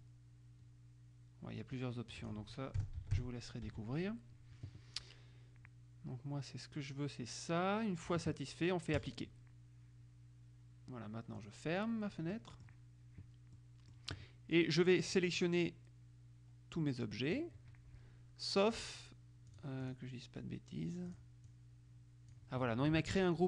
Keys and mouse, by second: 2.3 click, 2.9 KP_0, 3.1 Tab, 3.3 KP_0, 3.8 Tab, 9.1 click, 11.6 click, 12.5 middle click, 13.7 middle click, 15.3-18.0 drag, 19.7 click, 21.3 click, 23.1 ctrl+z.